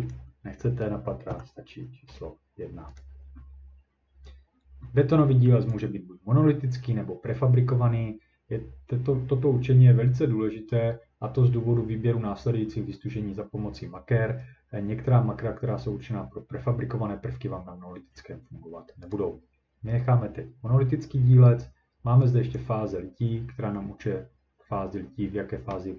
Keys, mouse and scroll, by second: 0.1 click, 1.3 1, 3.0 click, 5.7 click, 19.1 click, 22.6 click.